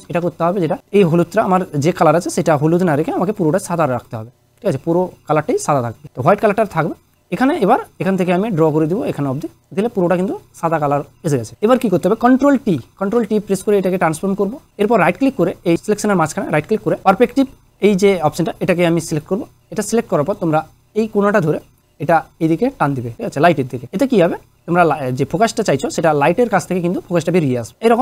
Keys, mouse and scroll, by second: 0.8 click, 6.0 click, 8.0-9.3 drag, 12.6 ctrl+t, 14.3-14.7 click, 14.8 right click, 19.2 click, 21.6-23.8 drag, 25.2-26.8 drag, 27.7-28.0 drag.